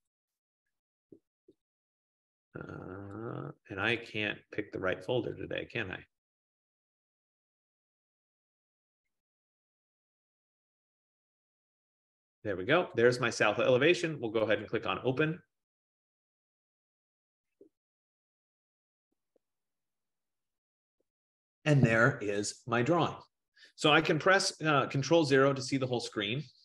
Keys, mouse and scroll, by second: 0.1 click, 0.5 click, 1.8 click, 2.0 click, 3.5 click, 4.1 click, 5.7 click, 5.8 click, 6.8 click, 7.1 click, 7.8 click, 8.0 click, 10.2 click, 10.4 click, 11.8 click, 11.9 click, 13.0 click, 14.9 click, 25.0 click, 25.3 ctrl+0.